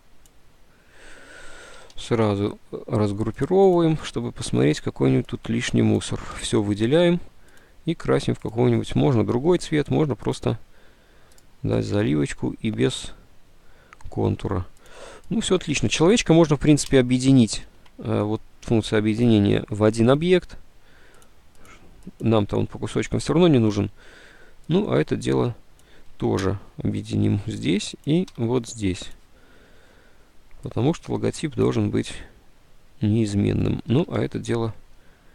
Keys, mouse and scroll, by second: 2.4 ctrl+u, 17.0 d, 18.1 d, 21.5 ctrl+z, 23.1 ctrl+z, 26.5 d, 28.4 d, 34.0 ctrl+g.